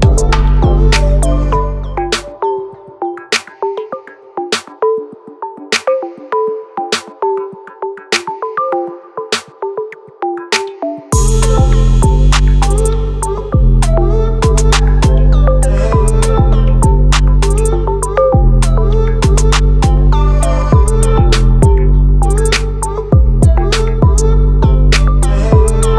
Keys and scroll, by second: 14.9 ctrl+t, 20.9 ctrl+z.